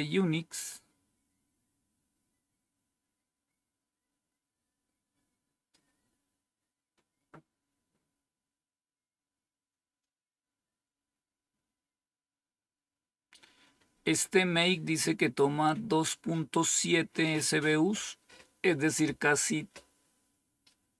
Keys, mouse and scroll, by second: 13.7-14.5 scroll up 1, 15.6-17.2 drag.